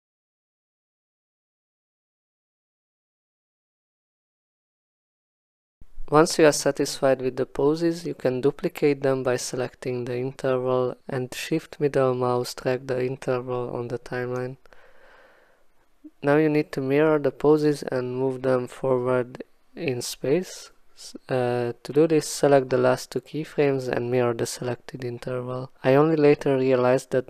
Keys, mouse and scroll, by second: 0.3 click, 0.5 click, 1.3 click, 1.4 click, 1.9 click, 2.0 ctrl+shift+z, 2.1 shift+click, 3.2-3.7 scroll, 3.7 click, 4.0 scroll, 4.1 click, 4.2 click, 4.4 click, 5.2 click, 5.3 r, 5.7 click, 5.8 ctrl+z, 5.8 click, 7.0 click, 9.1 shift+middle click, 11.0 click, 11.1 click, 11.2 click, 12.9 click, 15.7 click, 18.0 click, 19.3 click, 20.5 click, 21.3 click.